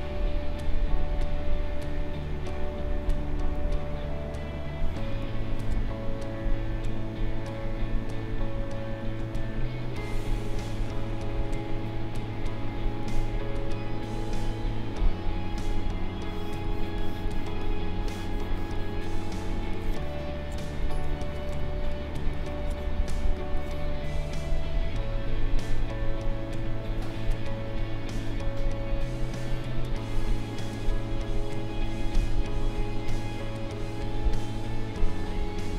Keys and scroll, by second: 3.5 space, 10.5 space, 20.8 ctrl+-, 21.4 space, 29.8 space.